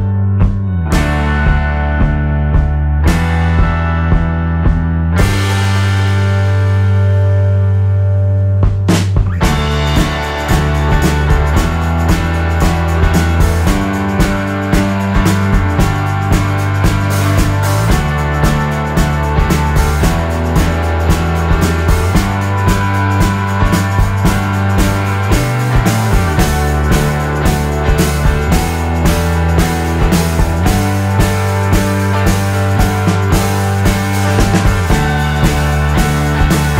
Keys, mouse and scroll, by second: 1.4 click, 2.8 click, 3.8-5.6 drag, 6.0 ctrl+KP_Add, 6.8 click, 7.7-9.1 ctrl+drag, 9.4 ctrl+click, 10.7-13.6 drag, 14.3 KP_Add, 16.2 click, 17.1 shift+click, 17.5 shift+click, 17.9 shift+click, 18.5 shift+click, 18.9 shift+click, 19.3 shift+click, 19.7 shift+click, 21.0 shift+click, 22.0 shift+click, 22.4 shift+click, 23.0 shift+click, 23.8 KP_Subtract, 24.4 F1, 24.9 shift+click, 26.3 shift+click, 28.5 click, 29.8 ctrl+z, 30.3-31.3 ctrl+drag, 32.7 click, 33.1 F6, 35.8 click, 36.2 shift+click, 36.5 shift+click.